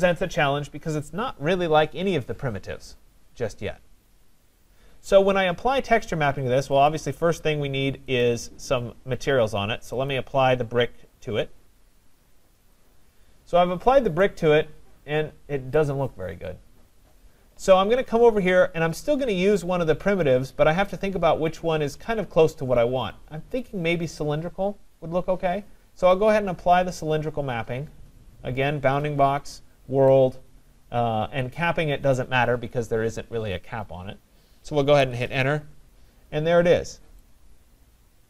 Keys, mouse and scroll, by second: 6.9 click, 8.2 right click, 10.1 click, 12.8 click, 15.8 right click, 18.9-20.8 right drag, 26.3 click, 29.3 Return, 30.2 Return, 35.0 Return.